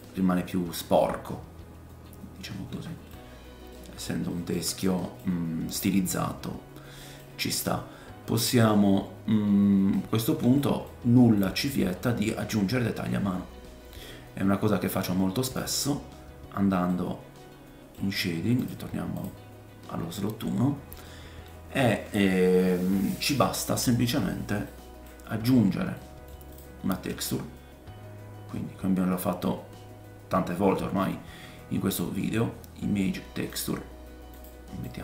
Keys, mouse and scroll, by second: 1.0 middle click, 3.3-3.7 scroll down 1, 3.7 middle click, 4.1-10.8 shift+right drag, 4.3 shift+middle click, 4.8 middle click, 5.7 scroll up 2, 10.8-15.7 shift+middle drag, 15.7 click, 15.8-18.6 middle drag, 18.6-19.9 drag, 19.8 middle click, 19.8 right click, 19.8-21.1 scroll down 5, 21.1 middle click, 21.1-21.7 scroll down 1, 23.5 middle click, 24.1-24.6 scroll up 4, 24.7 middle click, 25.3 middle click, 25.3-25.9 scroll up 3, 25.9 middle click, 26.5 click, 26.6 shift+right click, 26.9 shift+a, 27.1-35.0 drag, 34.8-35.0 middle drag, 34.8-35.0 right drag.